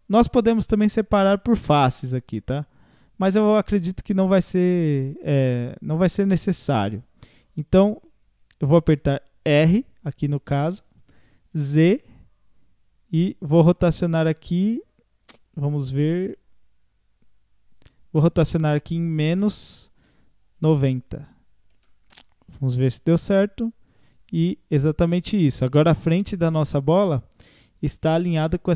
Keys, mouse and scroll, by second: 10.9 r, 22.8 click, 23.4-28.7 drag.